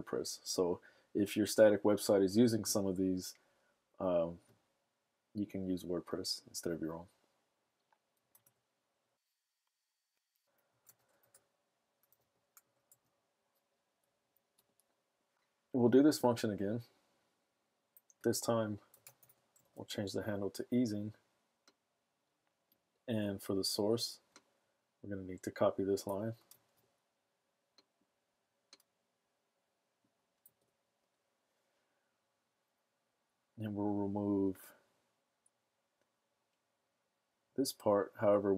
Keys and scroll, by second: 10.5-13.3 typing, 14.0 Down, 14.2 Down, 14.5 Return, 18.6-20.2 typing, 26.5 super+s, 30.4 super+v.